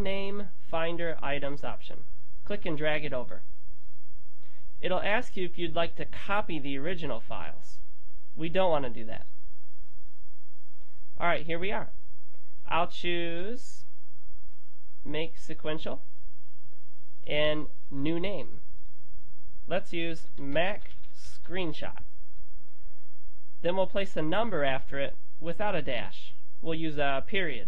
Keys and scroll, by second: 19.9-22.3 typing, 23.6-24.5 typing.